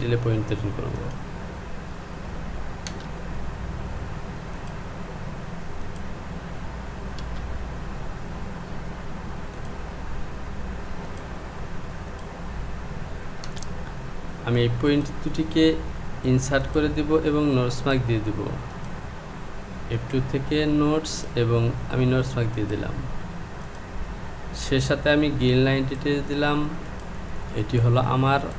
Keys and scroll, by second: 2.9 Return, 7.2 Return, 13.5 Return.